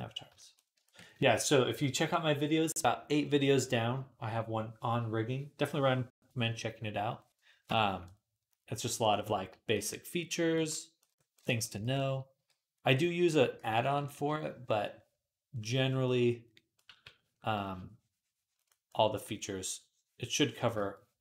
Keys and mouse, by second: 2.4-7.9 middle drag, 7.9-11.0 drag, 7.9-11.0 right drag, 10.4 d, 12.2 d, 13.6 [, 13.8 [, 13.9 [, 16.7 v.